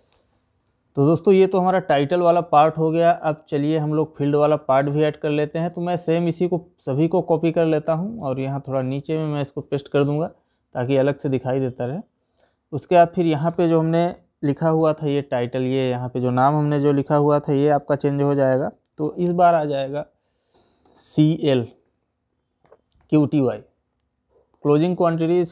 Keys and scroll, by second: 4.4 ctrl+c, 8.4 ctrl+v.